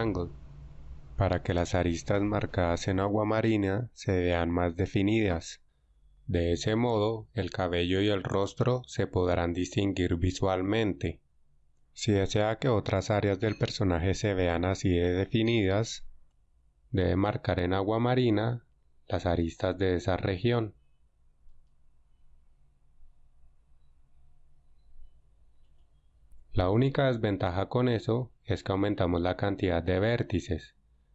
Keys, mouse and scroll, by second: 17.1 Tab, 18.4 ctrl+Tab, 21.5 alt+right click, 23.5 ctrl+e, 26.6 Tab.